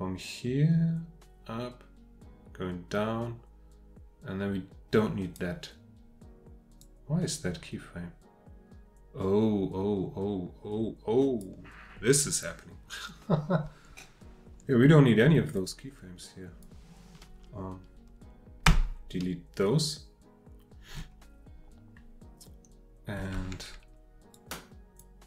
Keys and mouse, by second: 6.8-11.4 drag, 15.5-16.8 drag, 18.6 Delete, 24.3-25.0 drag.